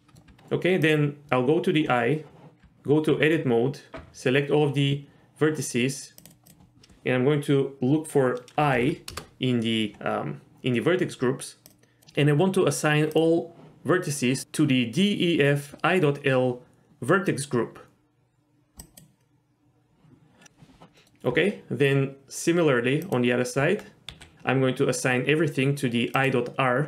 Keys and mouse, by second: 0.3 Tab, 2.6 Tab, 4.0 a, 6.2 click, 6.4-9.9 drag, 11.8 click, 13.1 click, 18.9 click, 21.0 middle click, 21.3 Tab, 23.5 Tab, 24.1 a, 26.1 click.